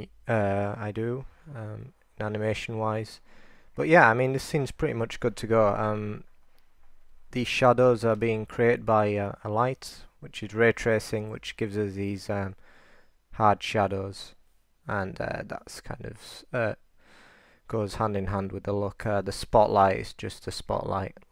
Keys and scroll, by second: 7.9-8.7 2, 11.3 super+r, 11.7 super+r, 12.4 super+r.